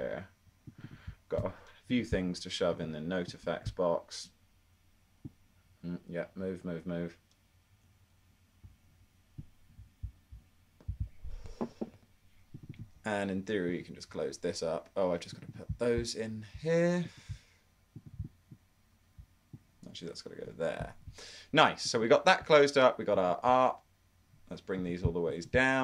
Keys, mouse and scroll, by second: 1.9 super+click.